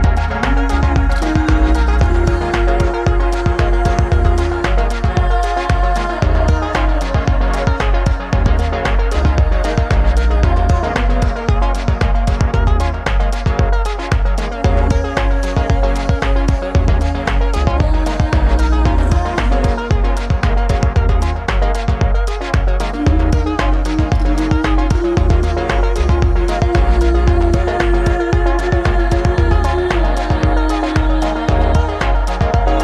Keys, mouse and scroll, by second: 6.7 s, 12.4-24.9 middle drag, 21.5 click, 21.5 right click, 24.9-27.6 right drag, 27.6-30.3 middle drag, 30.3 right click, 30.9-32.8 middle drag.